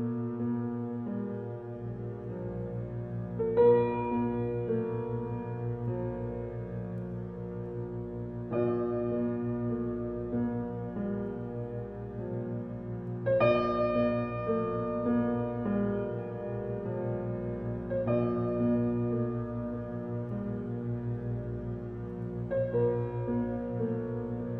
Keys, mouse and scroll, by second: 0.1-2.1 middle drag, 2.2 click, 2.4-2.7 scroll down 5, 2.7-3.9 middle drag, 3.9 click, 4.2-5.3 scroll down 1, 5.7 middle click, 6.1 shift+a, 9.0 shift+middle drag, 9.2-10.1 scroll up 3, 10.1 alt+z, 11.6-14.0 drag, 15.0-16.5 drag, 16.9 g, 18.1 scroll down 3, 18.4-18.7 shift+middle drag, 19.2 g, 20.3 g, 21.6-22.0 scroll up 10, 22.0 shift+middle click, 22.5 g.